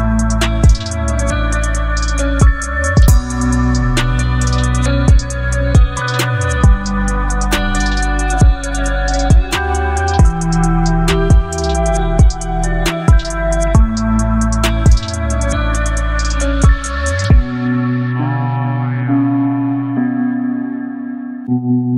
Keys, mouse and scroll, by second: 0.7 alt+scroll up 1, 2.7 ctrl+t, 5.2-7.8 shift+drag, 7.8 Return, 9.8 click, 12.6-13.1 alt+scroll up 1, 16.8 Left, 19.7-21.9 drag.